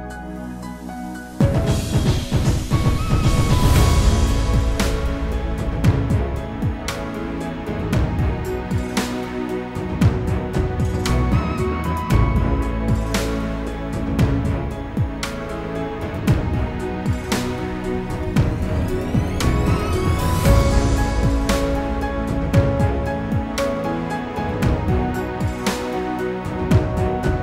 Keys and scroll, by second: 13.7 ctrl+g.